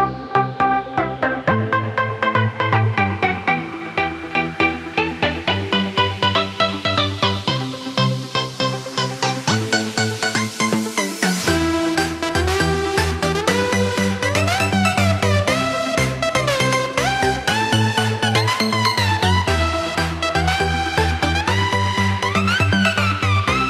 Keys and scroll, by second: 3.2 ctrl+0, 3.8 ctrl+9, 10.3 ctrl+=, 18.2 ctrl+z.